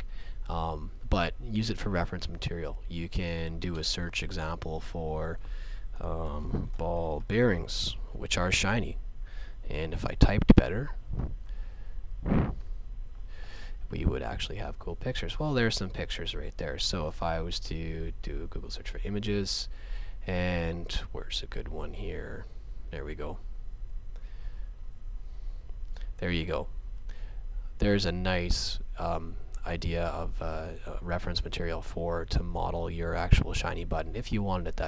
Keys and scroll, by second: 6.2-8.3 typing, 9.9 Left, 12.6 e.